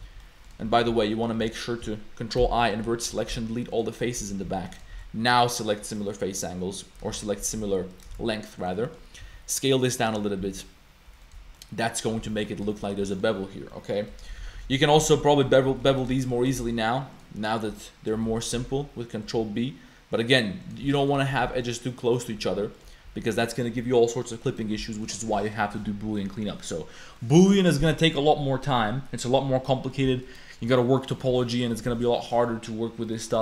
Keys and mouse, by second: 0.0 z, 0.2 click, 0.6 ctrl+z, 0.9 ctrl+z, 1.4 1, 2.4 ctrl+i, 3.1-4.9 typing, 4.0 click, 4.7 click, 6.0 click, 7.3 shift+g, 7.6 a, 7.9 click, 8.1 shift+g, 8.8 click, 9.2 s, 10.4 s, 11.3 Tab, 11.5 click, 12.2 a, 12.3 middle click, 12.7 shift+middle click, 13.1 middle click, 13.7 middle click, 14.1 Tab, 14.4 ctrl+z, 14.6 ctrl+z, 14.7 ctrl+z, 15.0 ctrl+z, 15.7 2, 16.2 shift+click, 16.5 shift+g, 17.4 click, 18.7 ctrl+b, 20.9 click, 21.2 shift+click, 21.4 Tab, 21.6 click, 22.5 Tab, 22.7 click, 23.1 Tab, 23.4 click, 24.1 click, 24.5 click, 25.6 click, 26.2 click, 26.4 middle click, 27.2 middle click, 29.9 middle click, 30.2 click, 30.7 middle click, 31.1 middle click, 31.4 middle click, 32.2 middle click, 33.0 middle click.